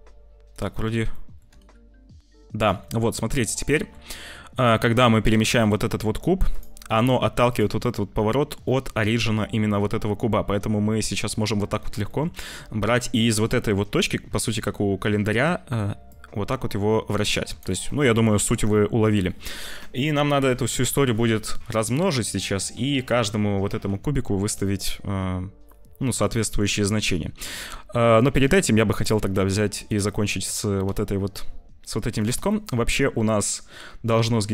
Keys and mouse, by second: 0.6 click, 1.1-2.6 drag, 1.5 g, 2.8 click, 3.4 click, 4.6 click, 5.2 g, 7.4 click, 7.9 click, 8.1 middle click, 8.9 middle click, 10.4 middle click, 12.0 shift+middle click, 14.4 shift+middle click, 16.0-17.5 drag, 17.9 click, 18.5 ctrl+s, 18.7 click, 28.3 click, 28.8 click, 29.2 ctrl+s, 29.8-32.0 drag, 32.1 click, 32.5 middle click, 34.1 middle click.